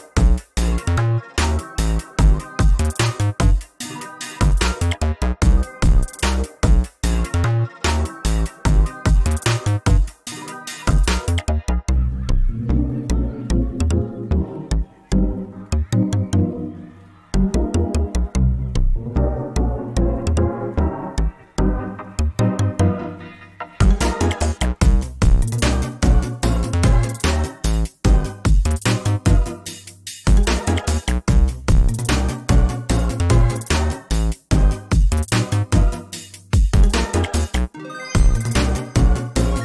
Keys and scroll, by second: 3.6 ctrl+space, 5.9 ctrl+z, 8.5 ctrl+space, 12.5 ctrl+space, 19.7 ctrl+shift+s, 24.8 ctrl+a, 25.0 ctrl+c, 25.7 ctrl+v, 28.2 ctrl+space, 29.2 ctrl+space, 32.8 ctrl+space, 34.1 ctrl+space, 35.3 ctrl+space, 36.7 ctrl+space, 38.6 ctrl+space.